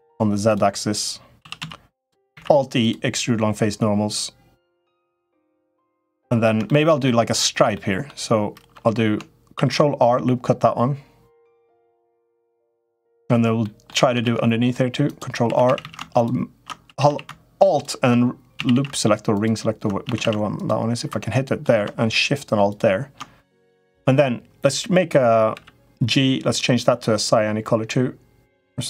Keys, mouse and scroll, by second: 1.1 s, 2.1 alt+e, 5.6 middle click, 6.5 shift+middle click, 6.9 middle click, 7.5 middle click, 9.3 ctrl+r, 12.6 middle click, 13.5 middle click, 14.0 ctrl+r, 15.3 3, 15.4 a, 15.6 a, 16.6 a, 16.8 a, 18.3 a, 18.5 a, 19.1 click, 19.8 a, 20.0 a, 20.3 alt+click, 20.9 middle click, 25.3 g.